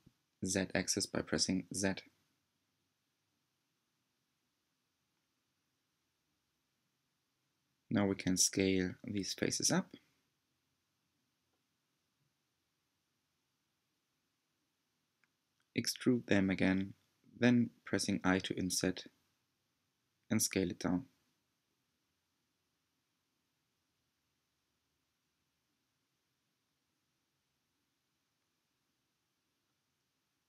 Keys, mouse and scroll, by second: 6.4 s, 8.3 click, 9.1 s, 18.5-20.2 middle drag, 20.2 e, 25.5 i.